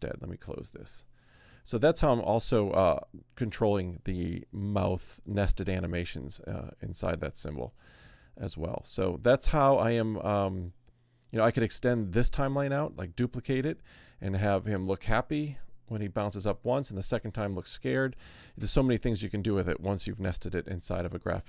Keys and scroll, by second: 0.0 space.